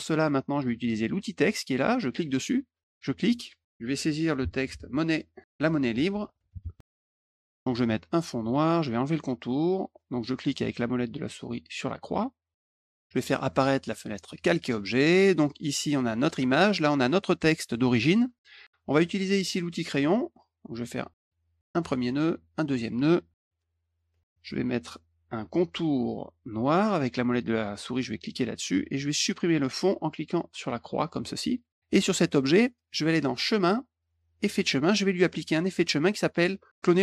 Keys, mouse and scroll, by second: 2.1 click, 2.9 click, 4.7-7.5 typing, 7.4 click, 8.4 click, 11.8 middle click, 12.5 click, 13.4 click, 14.2 click, 15.3 click, 16.2 click, 17.2 click, 19.9 click, 21.2 click, 22.2 click, 28.6 middle click, 30.8 click, 33.4 click, 34.4 click, 36.0 click.